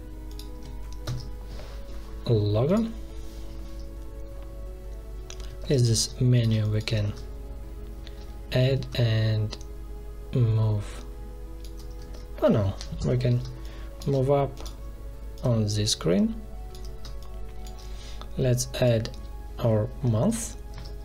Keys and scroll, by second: 1.0 ctrl+v, 5.6 ctrl+c, 5.8 space, 7.0 ctrl+v, 12.0 ctrl+z, 12.9 Delete, 13.3 space, 16.9 space, 20.6 ctrl+c.